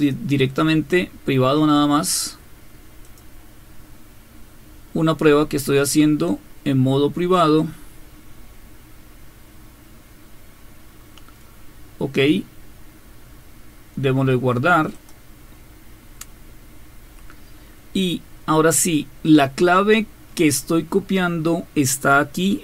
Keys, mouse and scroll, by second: 3.1 click, 9.4-10.4 scroll up 2, 10.4-11.4 scroll up 1, 11.4-12.6 scroll up 1, 12.6-14.1 scroll up 1, 14.1-14.9 scroll up 1, 14.9 click, 20.0-22.3 scroll down 2, 22.3-22.6 scroll down 1.